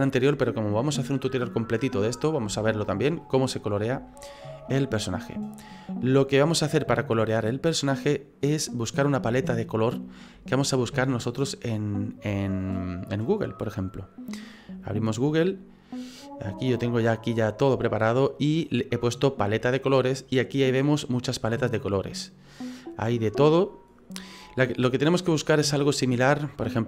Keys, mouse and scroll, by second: 4.1 shift+middle click, 4.6 middle click, 5.6 middle click, 5.7 shift+middle click, 9.5 shift+middle click.